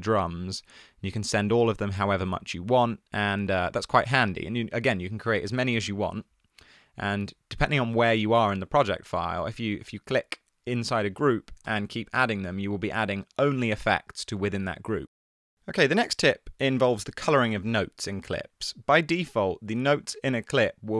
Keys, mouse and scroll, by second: 5.8 alt+super+t, 11.8 alt+super+t, 12.3 alt+super+t.